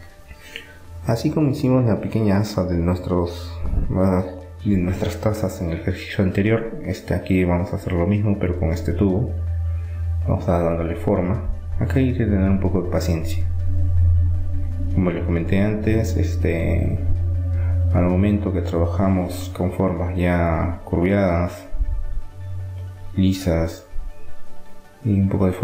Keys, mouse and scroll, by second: 2.0 e, 3.6-5.3 drag, 5.3 r, 7.3-8.9 drag, 10.7-12.6 drag, 12.3 e, 15.0-17.6 drag, 17.3 r, 23.6 s.